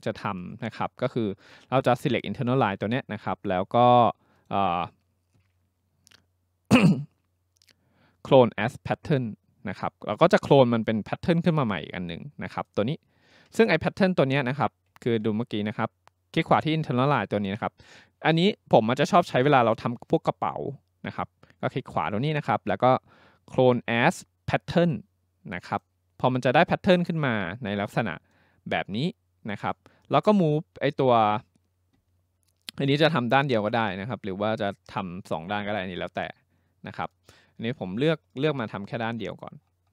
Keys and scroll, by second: 15.0 ctrl+z.